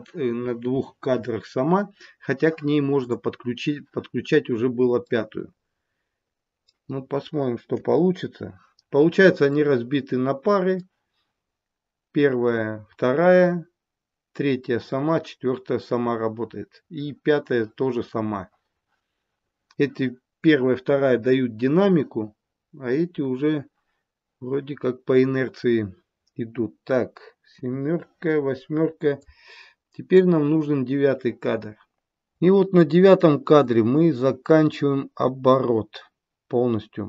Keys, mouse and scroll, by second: 2.9 click, 5.1 middle click, 7.6 KP_7, 9.5 middle click, 27.5 KP_7, 29.2 click, 32.8 click.